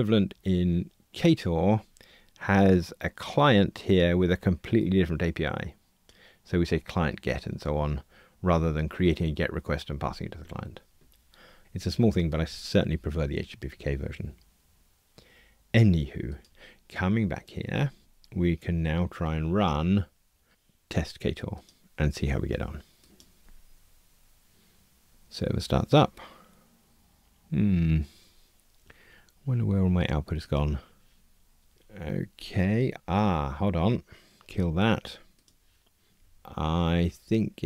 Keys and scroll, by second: 35.4 super+F2, 36.3 shift+super+F12.